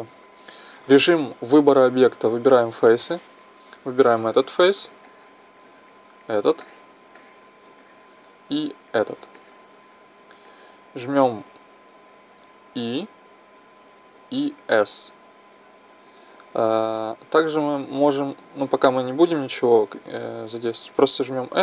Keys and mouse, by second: 4.0-5.8 right drag, 5.1 middle click, 5.8 middle click, 6.2-8.0 right drag, 8.0 middle click, 8.2 middle click, 8.9-10.7 right drag, 10.7-11.2 middle drag, 12.8 e.